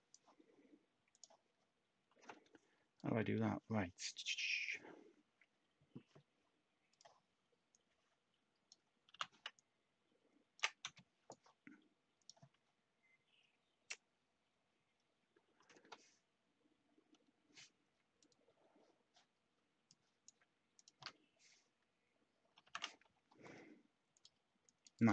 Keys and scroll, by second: 9.0 t, 10.8 /, 22.6 ctrl+k.